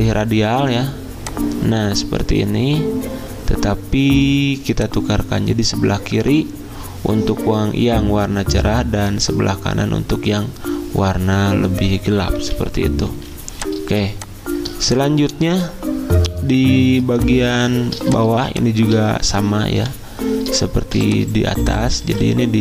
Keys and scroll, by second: 13.1 z, 17.0 i.